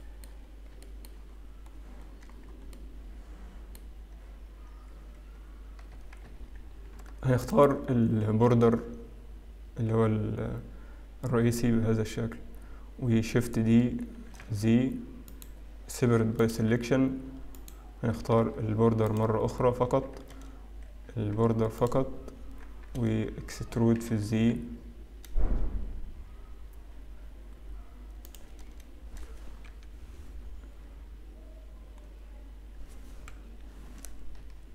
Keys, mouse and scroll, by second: 0.3 shift+middle click, 0.3-1.0 scroll up 1, 1.0 shift+middle click, 1.0-1.7 scroll up 2, 1.7 scroll down 1, 3.9 middle click, 3.9 scroll down 9, 6.0 Tab, 6.4 Tab, 6.4-7.2 scroll up 2, 7.4 alt+click, 8.1 scroll down 1, 8.9 middle click, 14.5 shift+d, 16.2 p, 16.9 Tab, 17.6 right click, 19.1 click, 21.1 Tab, 21.1 a, 21.8 click, 23.0 Tab, 23.0 a, 24.0 e, 28.7-29.7 scroll up 2, 31.5-32.2 scroll up 1, 32.2 scroll up 2.